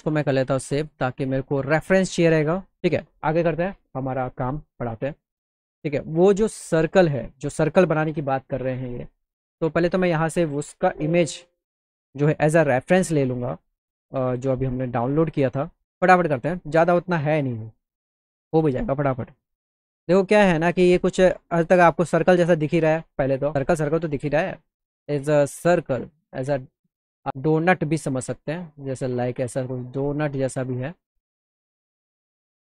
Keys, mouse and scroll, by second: 0.1 click, 5.0 click, 7.0 click, 9.7 click, 9.9 click, 12.5 click, 14.0 click, 15.1 click, 15.3 click, 28.1-29.4 drag, 32.6 click.